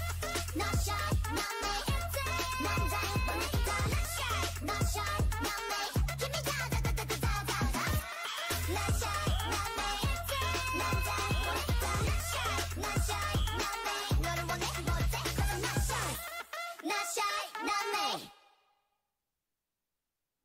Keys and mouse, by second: 1.4 z, 4.0 z, 4.8 k, 5.8 z, 7.6 ctrl+Tab, 9.0-10.7 drag, 12.0 k, 16.9 a, 17.6 ctrl+Tab, 19.2 k.